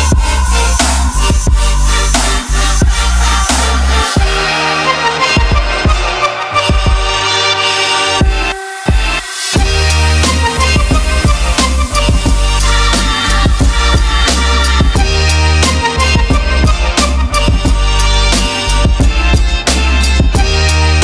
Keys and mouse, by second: 0.0 alt+shift+click, 0.8 middle click, 1.1 shift+middle click, 1.7 alt+shift+click, 2.4 middle click, 3.7 shift+click, 3.9 shift+middle click, 4.3 middle click, 5.3 middle click, 6.4-7.9 drag, 10.2 click, 10.5 ctrl+middle click, 10.9 middle click, 14.6 Tab, 18.7 click, 19.3 click, 20.5-20.8 middle drag.